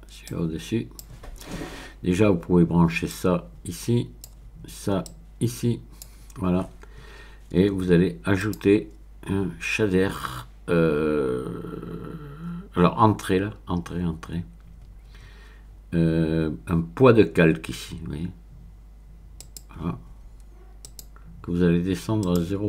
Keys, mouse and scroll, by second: 0.3-1.3 drag, 1.8-2.7 scroll up 1, 3.1-4.4 drag, 5.0-6.4 drag, 8.4 click, 19.4 click, 20.8 click, 22.2 click.